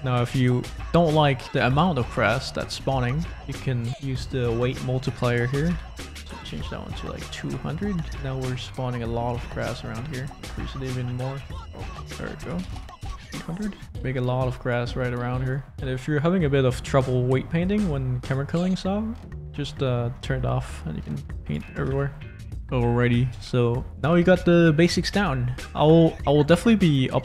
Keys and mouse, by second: 1.4 ctrl+z, 1.8 ctrl+z, 2.3 ctrl+z, 3.0 shift+click, 4.4-6.5 drag, 5.6 0, 11.5-13.0 drag, 12.7 0, 15.0 shift+click, 18.2-19.7 drag, 20.2 shift+click, 20.6 click, 21.9 ctrl+z, 23.2 space.